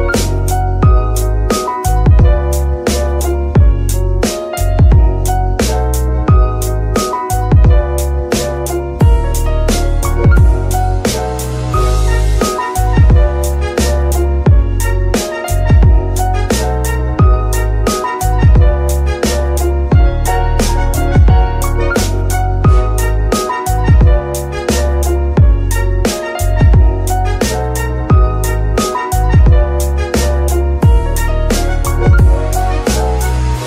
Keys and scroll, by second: 6.8 g, 7.8 Escape, 15.5 g, 15.9 Escape, 18.9 g, 19.3 Escape, 23.5 shift+g, 23.9 Escape, 27.9 g, 28.3 Escape.